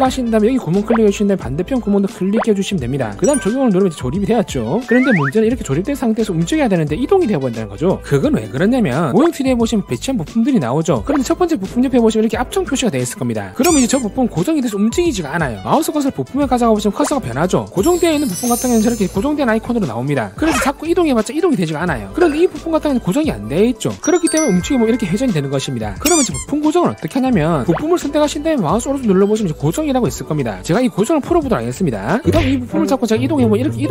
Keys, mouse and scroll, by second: 0.3 click, 1.3 click, 1.7 scroll up 2, 1.9 shift+middle click, 2.5 shift+middle click, 4.1 click, 4.4 click, 4.7 scroll down 2, 5.0 shift+middle click, 6.0 middle click, 7.1 click, 7.2 right click, 7.7 click, 7.8 right click, 7.8 click, 8.0 right click, 8.2 click, 8.5 right click, 8.7 click, 12.0 click, 21.1-22.2 drag, 23.3 click, 24.9-26.0 drag, 28.3 click, 29.0 right click, 32.8 click, 33.1 scroll up 2, 33.6-33.9 drag.